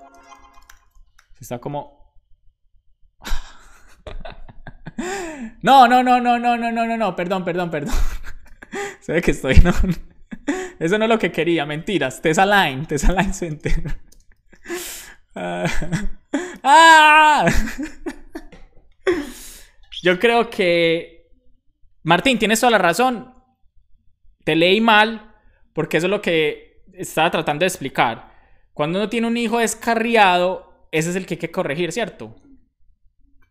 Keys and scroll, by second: 0.0-1.0 typing, 1.6 super+s, 5.0 Up, 5.8 Down, 7.1 super+z, 8.7 super+z, 10.5 super+s, 10.9 Return, 11.6-15.0 typing, 12.6 Return, 15.2 super+s.